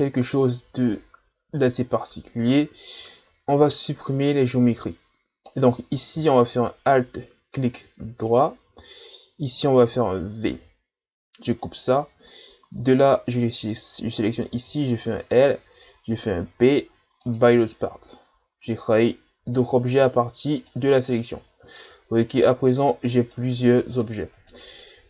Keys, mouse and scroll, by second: 1.9-3.1 scroll up 5, 3.1-3.4 shift+scroll up 3, 4.9-6.1 shift+scroll up 1, 8.3-10.7 alt+right drag, 10.7 v, 12.8 right click, 14.5 l, 16.3 p, 18.9 right click, 19.4 Tab, 19.9 right click, 20.5 right click, 21.0-22.1 scroll down 6, 22.2 right click, 22.8 right click, 23.2 right click, 23.9 right click, 24.3 right click.